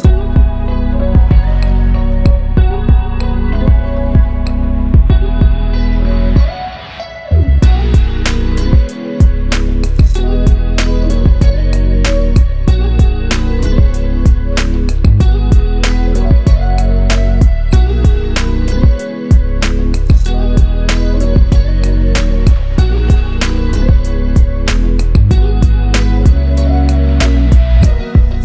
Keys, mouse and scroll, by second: 4.5 click, 7.2 shift+click, 7.8 ctrl+g, 8.6-9.3 shift+click, 9.7 Left, 10.5 scroll down 1, 11.0 Left, 11.3 Up, 11.6 Down, 11.9 click, 18.9 scroll up 1, 19.4 click, 20.2-20.7 shift+drag, 22.0 b, 22.3 click, 22.7 Right, 24.0 scroll down 1, 24.8 click, 26.2 scroll up 1, 27.3 click.